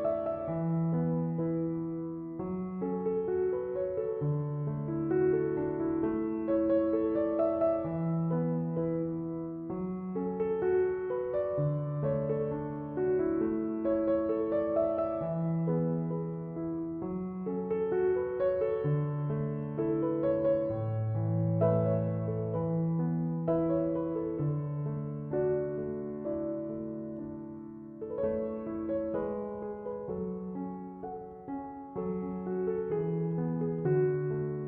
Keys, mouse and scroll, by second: 32.9 Return.